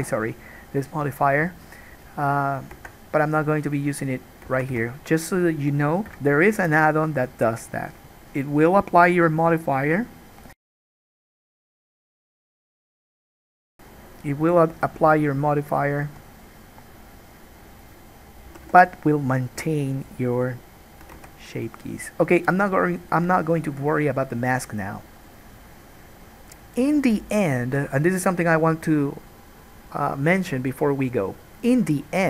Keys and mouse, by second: 3.0 Tab, 4.7 a, 4.9 1, 5.5 click, 6.1-18.0 middle drag, 6.3 KP_Decimal, 11.4 g, 16.4 alt+a, 18.0 click, 18.1-20.3 middle drag, 18.7 g, 20.3-21.3 drag, 21.3-32.2 alt+middle drag, 21.5 alt+a.